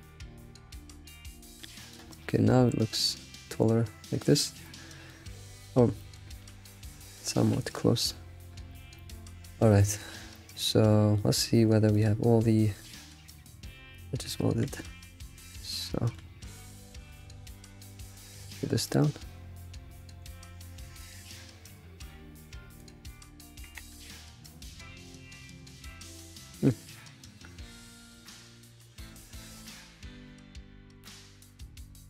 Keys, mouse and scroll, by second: 2.2-2.7 scroll down 11, 2.7-5.2 shift+middle drag, 5.2-5.9 scroll up 3, 6.0-6.3 shift+middle drag, 6.3 scroll up 4, 7.0 s, 9.0 shift+middle click, 9.1 scroll up 3, 9.7 shift+middle click, 10.0-10.3 scroll up 3, 10.3-11.9 shift+middle drag, 11.9 click, 12.8 click, 13.9 click, 14.5 Tab, 14.8 scroll down 3, 15.3-15.9 scroll up 3, 15.9-16.3 shift+middle drag, 16.3 scroll up 3, 17.1 Tab, 17.5 alt+click, 18.0 scroll down 3, 18.4 g, 23.5 g, 26.6 g, 28.1-29.2 shift+middle drag, 29.2 scroll down 2, 30.0 g, 31.3 Tab, 31.6 click.